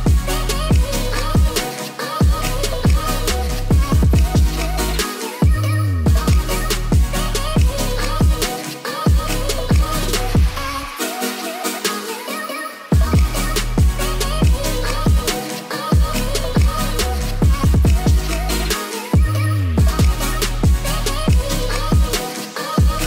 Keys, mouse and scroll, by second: 0.8 y, 1.5 click, 1.6 middle click, 2.2 s, 2.4 y, 2.8 0, 3.5 Return, 4.0 middle click, 5.1 s, 5.1 x, 6.3 s, 7.3 click, 7.5 s, 7.5 x, 8.1 Tab, 8.3 click, 8.6 ctrl+a, 10.0 click, 10.3 Tab, 11.4 s, 11.7 x, 12.6 click, 12.7 middle click, 14.0 click, 14.5 2, 14.6 click, 15.2 g, 15.3 z, 15.8 Tab, 15.9 middle click, 17.4-18.7 drag, 19.1 middle click, 19.8-23.0 drag.